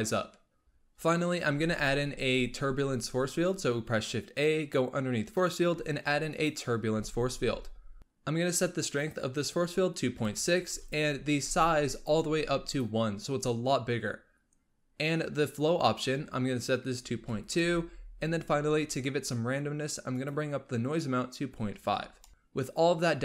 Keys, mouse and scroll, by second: 1.5 shift+a, 6.9 g, 8.8-12.7 drag, 15.7-18.8 drag, 20.0-22.4 drag.